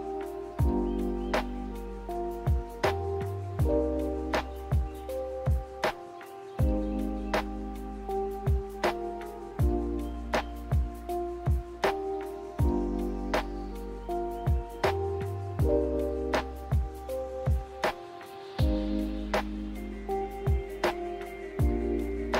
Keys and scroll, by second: 3.1 ctrl+z, 6.2 n, 7.2 a, 12.7 ctrl+z, 14.8 n, 15.8 b.